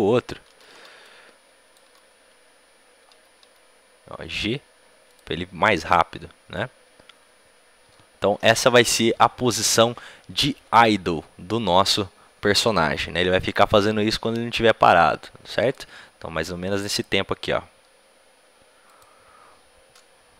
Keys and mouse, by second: 3.0 g, 6.5-18.7 drag.